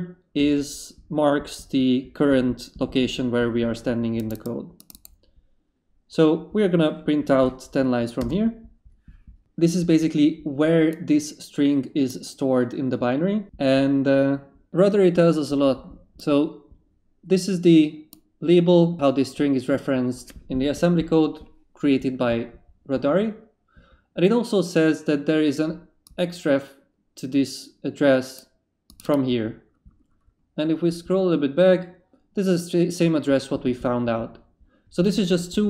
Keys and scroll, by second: 8.2 Return.